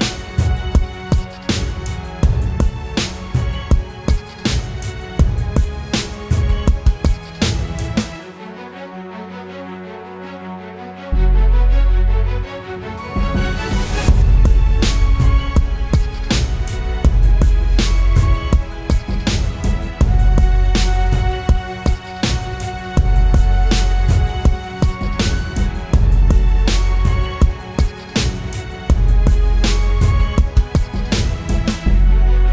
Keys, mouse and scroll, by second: 0.9 ctrl+-, 3.8 ctrl+click, 10.4 scroll up 1, 24.2 alt+click, 29.8 right click, 31.0 double click.